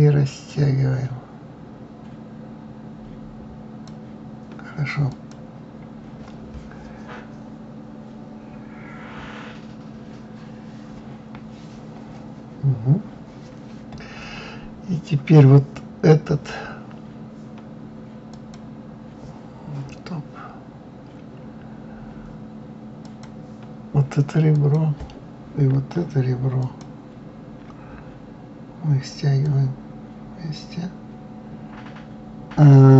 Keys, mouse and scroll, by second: 0.9-3.9 drag, 5.5 click, 18.7 click, 23.4 click, 25.0 click, 26.9 shift+click, 29.8-32.9 drag.